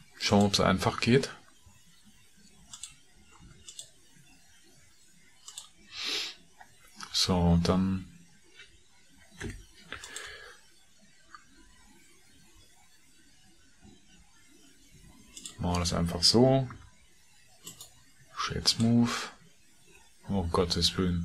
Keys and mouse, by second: 0.1 ctrl+r, 3.3 ctrl+r, 10.0 alt+3, 10.0 alt+click, 16.6 Tab, 17.7 click.